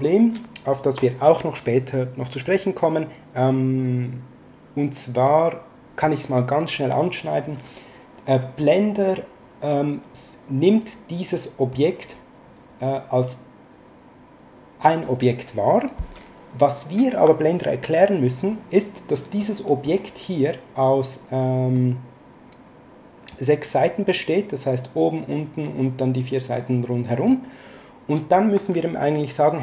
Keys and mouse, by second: 5.3 middle click, 11.3 middle click, 19.4 middle click, 21.7 middle click, 26.6 middle click.